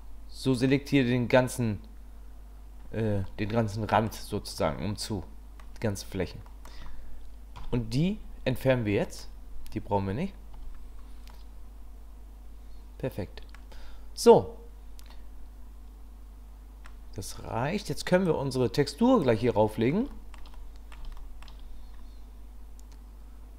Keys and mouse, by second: 0.0 middle click, 3.2 middle click, 4.6-5.6 middle drag, 6.5 click, 7.6 Delete, 10.5 Tab, 11.3-16.9 drag, 18.3 click, 20.1 shift+drag, 21.2 shift+click.